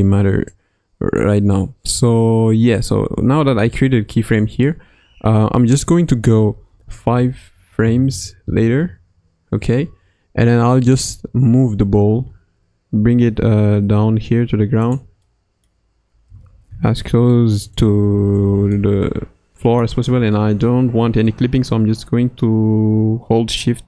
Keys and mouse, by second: 0.5 click, 6.4 Right, 6.6 Right, 6.8 Right, 6.9 Right, 7.2 Right, 7.8 Left, 8.4 Left, 10.9 KP_1, 12.1 g, 15.2-15.7 middle drag, 16.2 g, 18.2 KP_Decimal, 18.7-20.0 middle drag, 20.0 g.